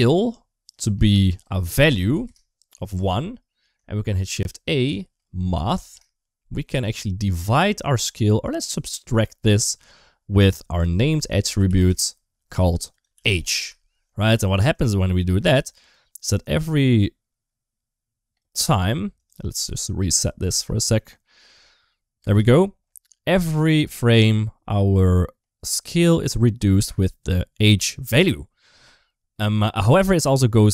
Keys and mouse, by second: 0.5-2.9 drag, 4.1 shift+a, 7.2-8.8 drag, 10.2 click, 10.5-12.4 drag, 12.8 click, 14.5-18.2 drag, 20.3 space, 22.0 space, 23.1-30.7 drag.